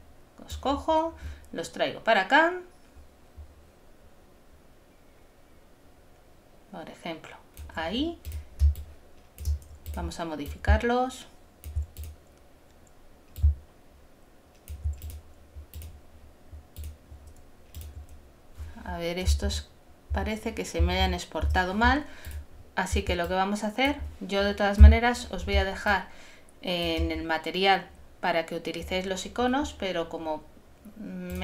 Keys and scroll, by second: 19.4 super++, 20.8 super+-.